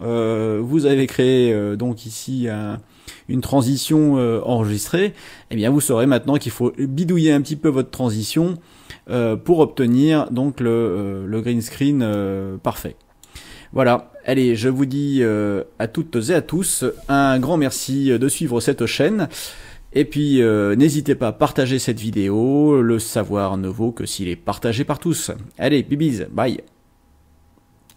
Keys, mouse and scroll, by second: 12.1-13.4 drag, 27.9 click.